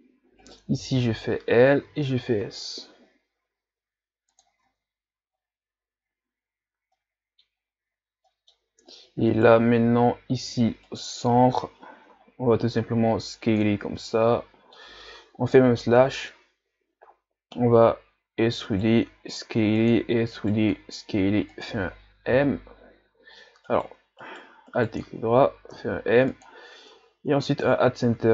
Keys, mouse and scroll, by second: 0.4 right click, 0.8 l, 1.8 s, 4.7 Tab, 5.3-6.1 scroll down 1, 6.1-6.9 ctrl+scroll up 1, 7.0 middle click, 7.6-8.3 scroll up 2, 8.3 middle click, 8.6 Tab, 9.3 alt+right click, 10.8 alt+right click, 12.1 s, 14.0-15.5 middle drag, 15.5 KP_Divide, 16.0 middle click, 16.6-17.6 scroll up 1, 18.4 e, 22.3 l, 23.7 right click, 24.2 alt+right click, 24.7 alt+right click, 25.7 m, 26.9 Tab, 27.5-28.3 scroll down 2.